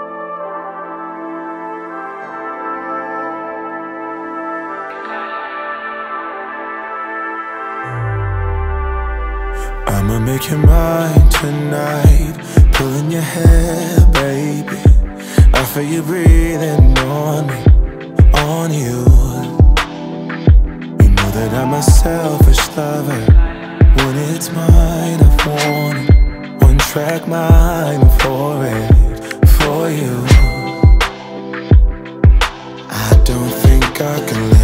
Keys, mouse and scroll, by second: 0.4 typing, 1.9-2.6 typing, 6.9 u, 7.8-13.0 drag, 14.4 space, 19.5 click, 20.0 space, 21.9-29.7 drag, 30.1 s, 31.2 click, 32.4 shift+Page_Down.